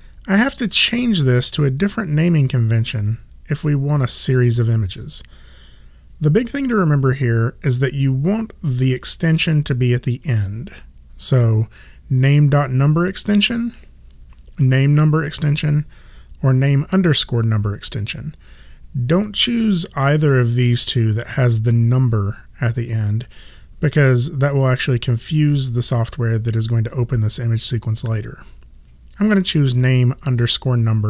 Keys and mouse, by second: 0.9 click.